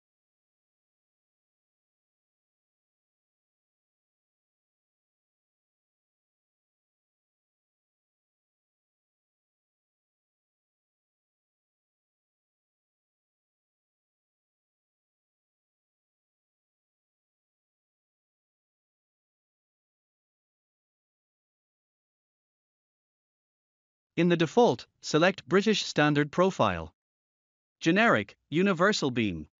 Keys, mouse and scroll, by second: 0.5 click, 2.2 click, 4.1 click, 6.7 typing, 8.9-9.7 typing, 11.0 click, 13.6 click, 15.1 click, 15.9 s, 20.0 typing, 21.1 click, 24.3 click, 24.8-26.4 scroll up 1, 26.7 click, 28.6-29.6 scroll up 1.